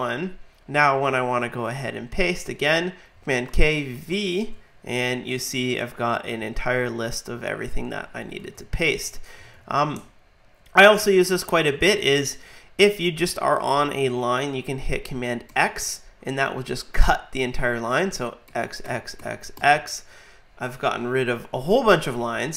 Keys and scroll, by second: 3.5 super+k, 3.9 super+v, 15.5 super+x, 18.5 super+x.